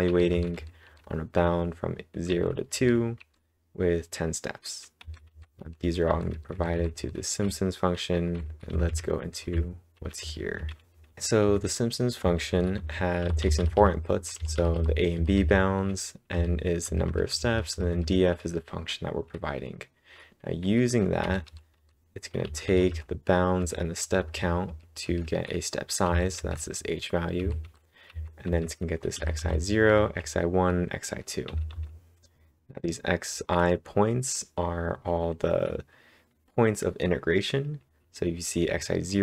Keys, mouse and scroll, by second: 4.7-7.2 typing, 9.9 ctrl+l, 10.2 ctrl+l, 10.7-11.6 typing, 16.6-17.3 typing, 24.8-25.5 typing, 27.1-27.9 typing.